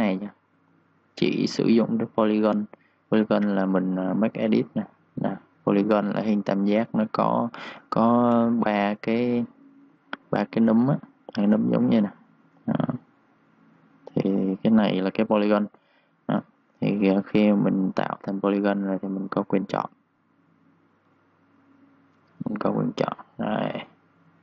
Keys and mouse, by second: 7.7 shift+Num_Lock, 8.1 ctrl+shift+d, 16.0 Escape, 17.4 click, 19.9-23.2 typing, 20.0 click, 22.0 click, 22.8 click, 23.8 click.